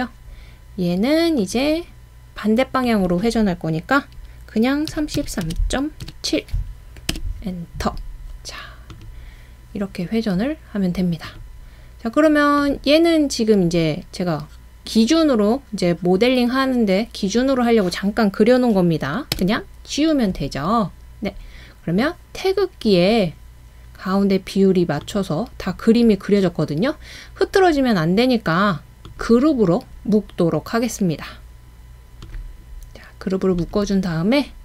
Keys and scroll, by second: 4.7-6.1 typing, 7.1 Return, 19.3 BackSpace.